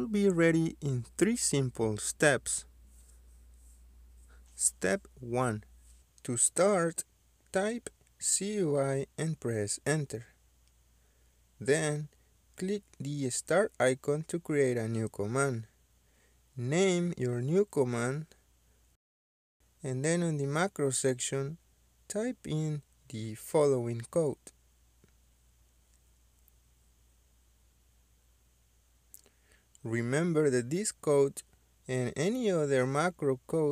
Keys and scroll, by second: 4.2-5.6 typing, 5.7 Return, 17.8-21.0 typing, 25.1-25.8 typing.